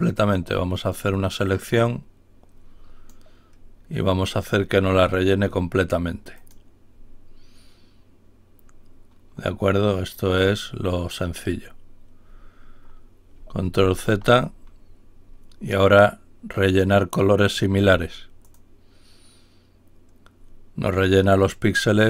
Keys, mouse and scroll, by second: 0.1 click, 1.4-4.4 drag, 5.0 click, 6.3 click, 13.7 ctrl+y, 16.6 click, 18.4 click.